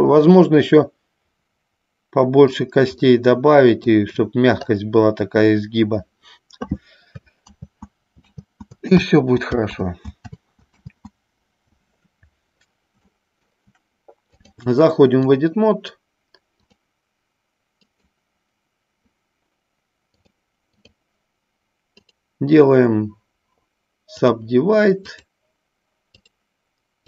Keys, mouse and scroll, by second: 0.6-2.8 middle drag, 3.2 middle click, 7.9 ctrl+z, 8.8 ctrl+z, 13.4 middle click, 14.6 click, 16.9 click, 20.2 click, 25.2 click.